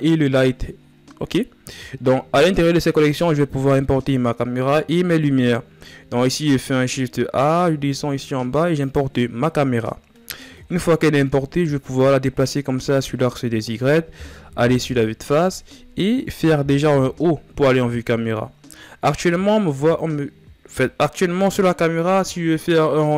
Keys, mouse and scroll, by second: 9.4 scroll down 3, 9.7-11.6 middle drag, 11.6-14.2 drag, 14.2 KP_1, 15.5-15.9 ctrl+scroll up 1, 16.5 KP_0.